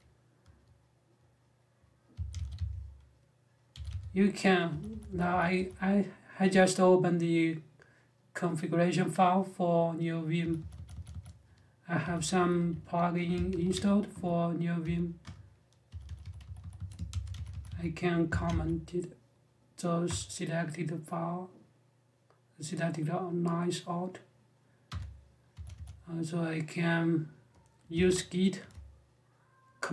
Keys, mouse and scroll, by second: 1.6-5.3 typing, 10.2-18.5 typing, 15.0 Return, 18.9 Escape, 19.8 space, 24.6 u, 25.3 j, 25.5 j, 27.9 :.